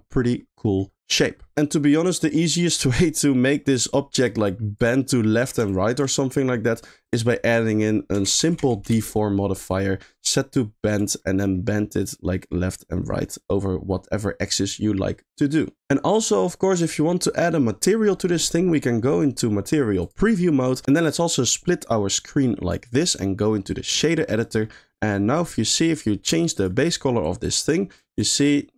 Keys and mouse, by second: 0.1 middle click, 0.8 middle click, 1.5 middle click, 4.3 click, 5.7 ctrl+click, 7.0-8.9 drag, 9.9 middle click, 10.9 click, 11.2 middle click, 12.2-15.8 drag, 16.8 middle click, 21.2-22.7 drag, 23.0-23.9 drag, 24.8 middle click, 25.5 middle click, 26.5 click.